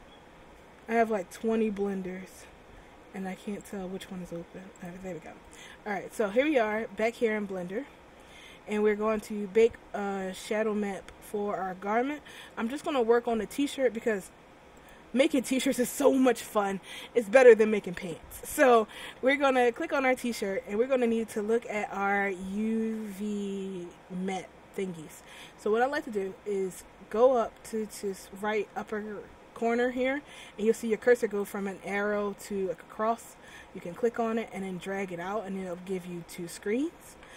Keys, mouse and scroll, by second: 6.1-7.3 scroll up 2, 7.3 middle click, 8.4 scroll up 2, 8.7-9.5 scroll down 2, 12.1-12.6 scroll down 1, 12.6 middle click, 14.9 click, 16.3 scroll up 1, 17.0-17.8 scroll up 2, 17.8 scroll up 1, 18.7-19.5 scroll down 2, 19.9 right click, 21.2 middle click, 31.4 click, 33.6 click.